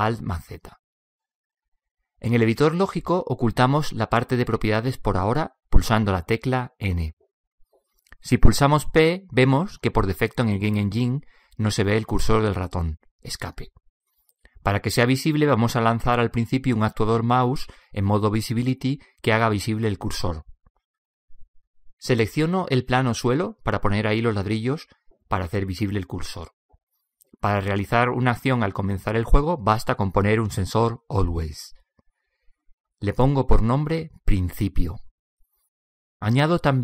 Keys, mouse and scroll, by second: 4.2-10.0 drag, 10.0 n, 10.8 p, 13.7 p, 24.0-31.0 right drag, 32.5-36.8 drag.